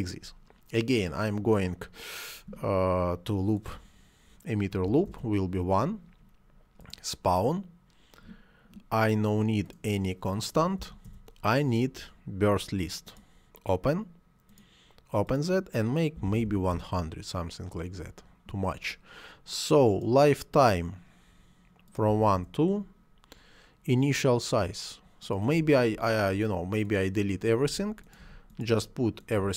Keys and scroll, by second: 4.7 1, 4.9 Return, 10.6 0, 10.9 Return, 16.0 1, 16.1 0, 16.5 Return, 21.9 2, 22.1 Return, 27.4 Delete.